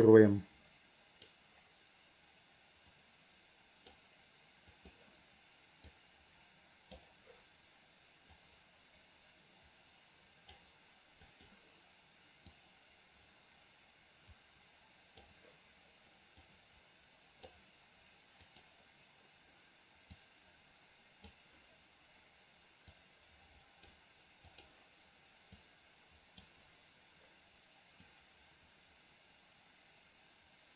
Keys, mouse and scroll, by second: 0.2-1.4 drag, 3.1 click, 4.9-7.1 drag, 8.4-10.6 drag, 11.4 click, 12.7-15.4 drag, 16.5-17.6 drag, 18.6-21.4 drag, 23.0 click, 24.6-26.6 drag, 28.2-30.7 drag.